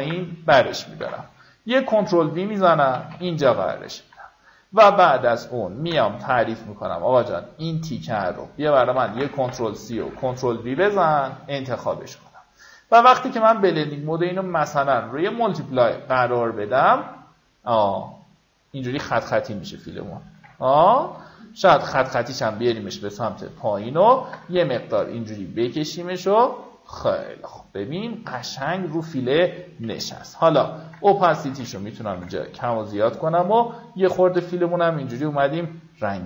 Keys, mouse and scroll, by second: 0.1 Tab, 5.4-6.5 alt+scroll up 1, 6.5 alt+m, 7.4 click, 10.9 click, 11.3 Delete, 12.2 click, 17.3 alt+scroll down 1, 18.0-18.6 alt+scroll down 1, 18.6-19.0 alt+scroll up 2, 19.6 click, 21.6-26.9 drag, 28.7 click, 30.4 KP_3, 34.2-34.7 alt+scroll down 1, 35.1 alt+scroll up 1.